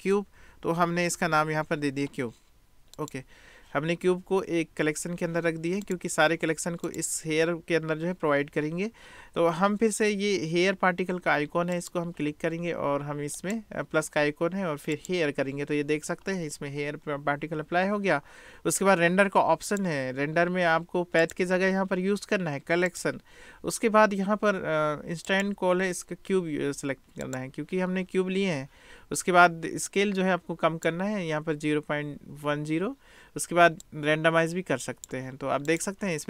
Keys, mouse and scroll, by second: 5.8 click, 11.8 click, 13.6 click, 14.9 click, 19.8 drag, 21.3-23.0 drag, 25.3-27.4 drag, 27.4 middle click, 29.9 click, 33.9-35.2 drag, 35.8 drag.